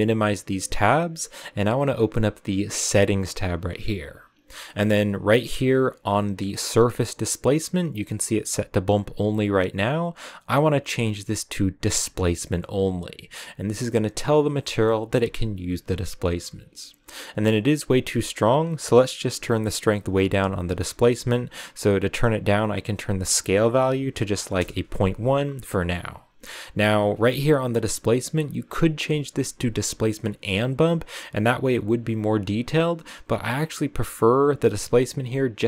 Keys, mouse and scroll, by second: 15.3-16.6 middle drag, 16.6-18.2 scroll up 2, 18.2-21.5 drag, 23.1-26.6 drag, 27.5-27.8 scroll down 2, 28.1-31.5 drag, 35.2-35.6 drag.